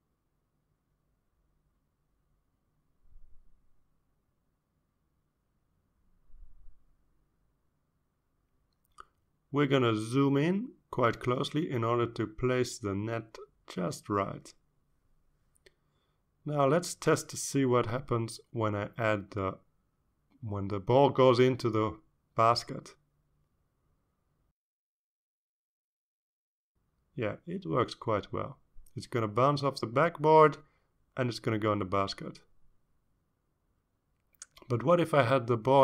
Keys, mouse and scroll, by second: 1.3 click, 2.9 click, 4.6-6.3 drag, 7.5 click, 9.5-9.8 ctrl+scroll up 2, 10.6-12.0 ctrl+scroll up 6, 12.3-12.7 ctrl+scroll up 4, 13.3-16.8 ctrl+drag, 17.5-18.5 ctrl+scroll down 6, 19.1 shift+scroll up 2, 19.5-20.1 shift+scroll down 3, 20.8 click, 21.3 click, 22.1 click, 23.5 click, 24.3 click, 25.0-31.1 drag, 32.5 click, 33.3-35.0 drag, 35.7 click.